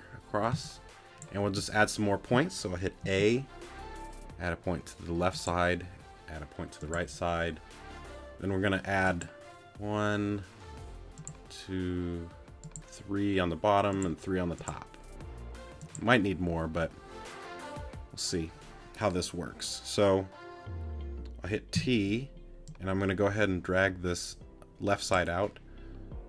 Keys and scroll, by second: 0.5 space, 3.0 a, 21.7 t.